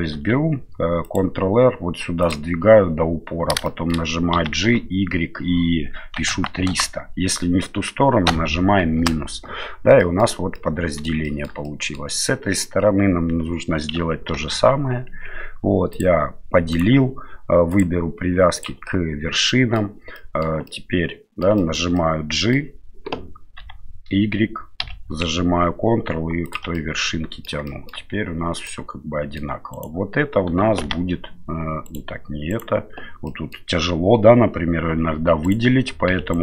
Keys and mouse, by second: 0.1 ctrl+r, 3.6-9.5 shift+middle drag, 4.3 g, 10.0 middle click, 10.5 middle click, 11.2 shift+middle click, 11.6 middle click, 14.3 ctrl+r, 17.7-19.0 drag, 19.5 middle click, 20.1 middle click, 20.7 middle click, 21.6 shift+middle click, 21.9 middle click, 23.6 g, 26.7 middle click, 27.7 shift+middle click, 28.7 middle click, 29.7 right click, 30.8 g, 32.5 right click, 33.3 middle click, 35.4 right click, 36.1 3, 36.3-36.4 right drag.